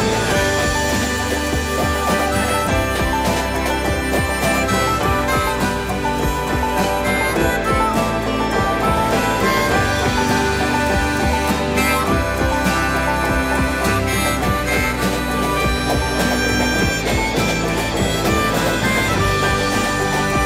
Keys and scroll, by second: 0.6 2, 0.7 Return, 1.4 space, 5.6 Delete.